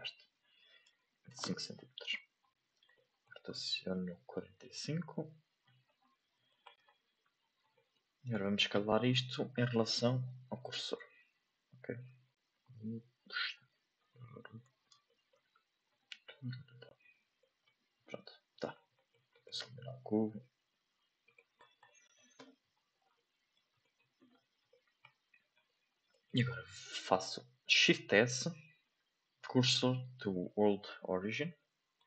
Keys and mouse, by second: 2.9 shift+middle click, 4.3 r, 7.7 shift+middle drag, 8.3 right click, 9.5-10.6 drag, 12.5 s, 13.9 s, 15.0 middle drag, 15.8 s, 17.3 middle drag, 17.9 s, 18.9 middle click, 19.3 right click, 20.1 x, 21.2 right click, 21.8 shift+middle click, 22.3 n, 23.1-23.5 middle drag, 23.8 middle click, 24.1 a, 24.6-25.0 shift+middle drag, 25.5 click, 26.1 shift+middle click, 31.5-32.0 shift+middle drag.